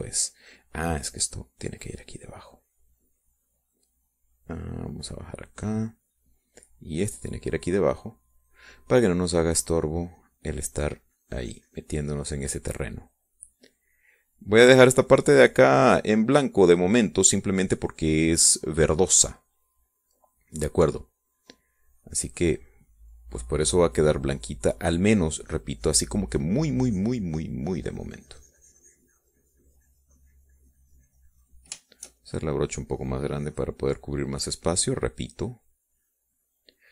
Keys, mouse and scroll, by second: 2.1-3.4 drag, 3.7 click, 4.7 click, 5.5 click, 6.6 click, 7.5-8.5 drag, 9.0-10.1 drag, 11.4-18.9 drag, 19.2 click, 21.4 middle click, 22.7-26.7 drag, 26.8 click, 27.7 middle click, 28.3-33.1 drag, 33.2-35.6 shift+drag, 35.8-36.9 drag.